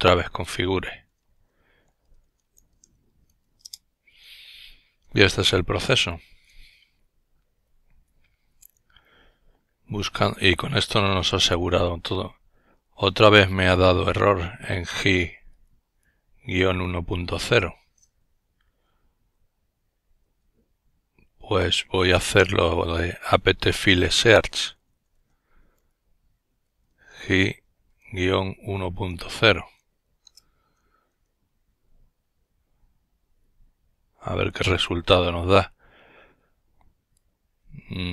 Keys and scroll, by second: 0.2-3.4 typing, 5.6 typing, 18.2 Up, 18.8 Up, 19.8 Up, 20.8 Up, 25.9-28.8 typing, 29.9 Return, 31.2 typing.